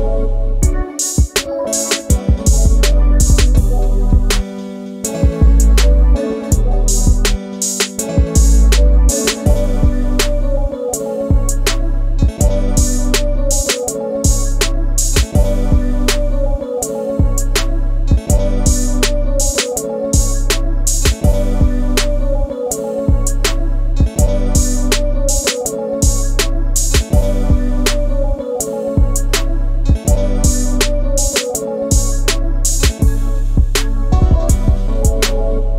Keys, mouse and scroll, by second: 0.5 scroll down 1, 0.7-1.4 middle drag, 1.4 shift+click, 2.8 ctrl+j, 3.7 click, 8.1 click, 8.7 middle click, 9.4 click, 9.7-12.7 middle drag, 12.7 click, 12.9 scroll down 2, 13.2 drag, 13.5 scroll down 1, 13.8 KP_1, 13.9-14.5 scroll up 2, 14.5 shift+middle click, 15.0 click, 15.3-15.6 shift+middle drag, 15.6 scroll up 4, 15.8 click, 16.2-16.6 scroll down 8, 16.6 middle click, 18.3 shift+a, 18.7 scroll down 1, 18.8-19.1 middle drag, 19.1 scroll up 2, 19.4 s, 22.2-22.8 scroll down 7, 22.8 middle click, 23.3 s, 25.3-25.8 scroll up 3, 26.0 scroll down 1, 26.3-27.4 middle drag, 27.4-28.1 scroll up 1, 28.1 click, 28.7-31.2 middle drag, 31.2 click, 32.0 shift+middle click, 32.3-34.2 scroll up 1, 34.2-34.7 scroll up 2, 34.7 click, 35.6 click.